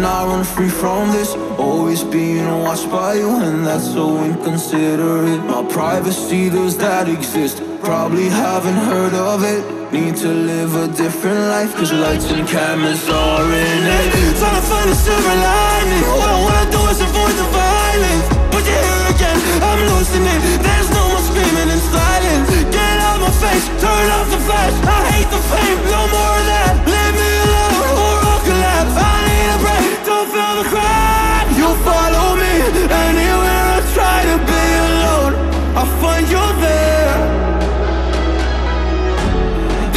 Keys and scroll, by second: 4.6-7.1 typing, 9.5 shift+1, 39.2 2.